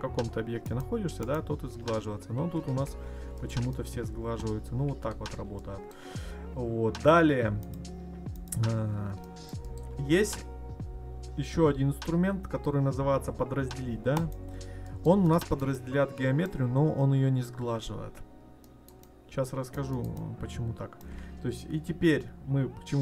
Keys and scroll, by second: 2.1 ctrl+z.